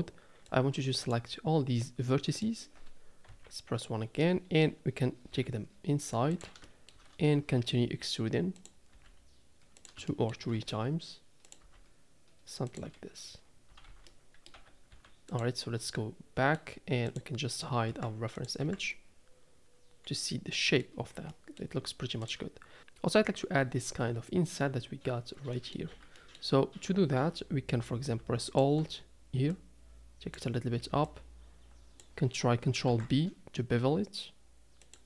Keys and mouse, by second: 1.8 middle click, 3.3 KP_1, 5.3 g, 6.7 shift+middle click, 7.5 e, 8.9 e, 10.1 shift+middle click, 10.5 e, 11.6 e, 13.7 a, 14.0 a, 14.0 middle click, 14.5 Tab, 14.9 z, 15.7 middle click, 15.9-16.6 middle drag, 17.9 h, 18.3 click, 18.6 h, 19.0-20.8 middle drag, 21.3 middle drag, 22.2 click, 25.5 middle click, 25.9 Tab, 26.2 middle click, 28.5 alt+click, 29.5 click, 31.3 click, 32.8 ctrl+b.